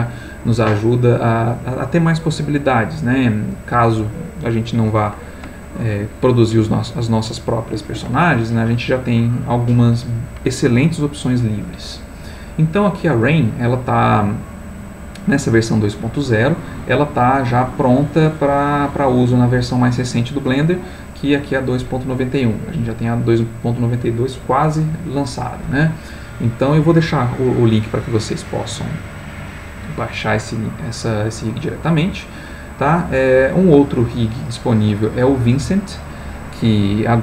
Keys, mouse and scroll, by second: 16.7 scroll down 1, 17.8-18.1 scroll down 1, 18.7-19.5 scroll up 1, 34.0 click.